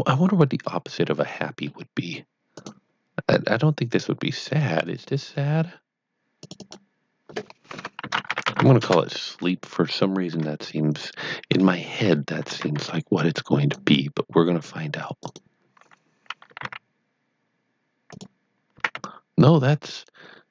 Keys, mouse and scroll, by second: 0.6 middle click, 2.5 click, 5.0 double click, 6.4 click, 6.5 double click, 8.2-9.0 typing, 10.2 Tab, 11.0-11.5 scroll up 1, 11.5 middle click, 12.4 alt+a, 13.2 click, 15.3 right click, 16.2-17.1 typing, 18.0 click, 18.5-19.4 typing.